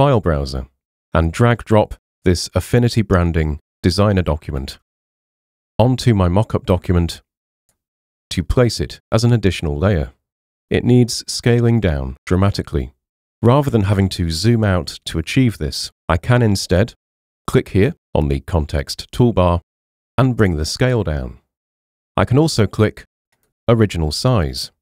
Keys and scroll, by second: 4.8 super+Tab, 5.8 super+Tab.